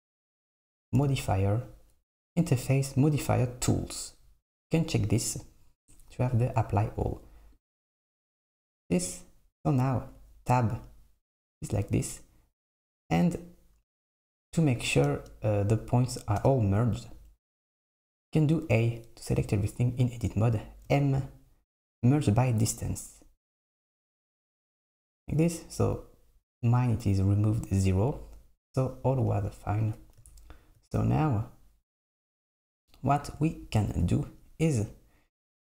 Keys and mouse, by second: 7.6 click, 9.9 Tab, 14.9 a, 15.2 space, 16.5 space, 18.2 a, 21.0 m, 24.1 Tab, 24.8 super+middle click, 32.2 Tab.